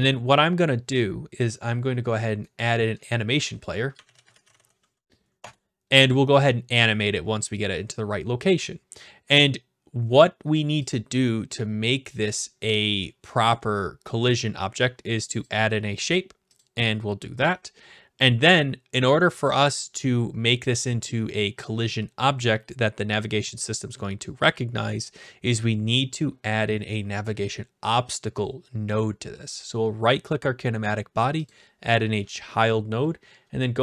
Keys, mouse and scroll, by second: 2.6 right click, 3.6 click, 3.7-5.1 typing, 5.4 Return, 10.9-12.0 drag, 15.4-16.5 drag, 16.6-17.7 drag, 19.5-20.6 drag, 20.8-21.9 drag, 29.7-30.8 right drag, 32.4 click.